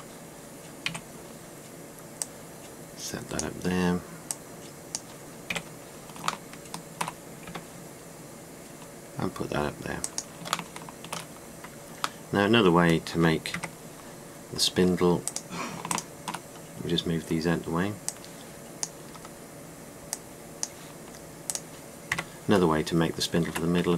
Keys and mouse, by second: 0.0 r, 1.5 KP_3, 6.2 KP_1, 8.1 g, 11.3 drag, 12.1 middle click, 12.9 middle click, 13.1 middle click, 14.2 KP_Decimal, 22.8 KP_Decimal.